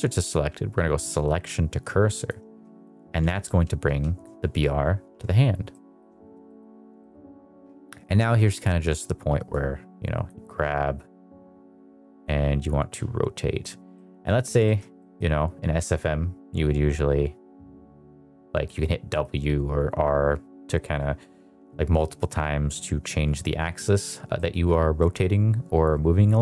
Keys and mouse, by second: 2.5 s, 3.7 Escape, 5.6 middle drag, 6.4 middle drag, 6.9 shift+middle click, 8.5 click, 9.4 click, 10.9 click, 12.8 click, 13.9-14.3 middle drag, 14.5 shift+middle click, 14.9 middle drag, 18.6 middle drag, 19.0 middle drag, 24.3 middle click, 24.9 middle click.